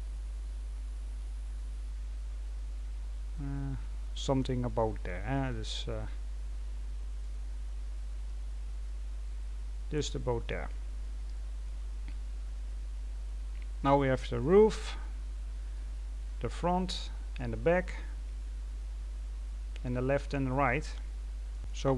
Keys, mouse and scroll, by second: 1.8-2.4 scroll down 1, 2.4-4.6 scroll down 1, 4.6-5.4 scroll down 1, 5.4-7.1 scroll down 1, 7.1-8.2 scroll down 1, 8.2-21.9 middle drag.